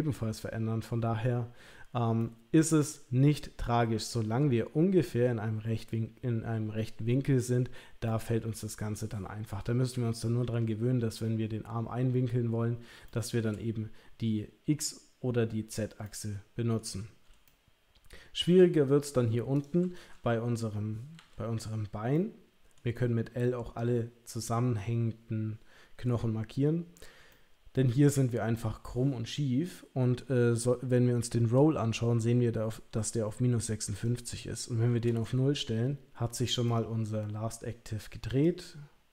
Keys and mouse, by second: 2.2-7.5 middle drag, 8.0-11.1 middle drag, 13.0 shift+middle click, 16.0 middle click, 17.4-18.5 shift+middle drag, 19.5 click, 21.2 l, 22.1 middle click, 27.3-30.2 middle drag, 34.1-35.1 drag, 36.6 click.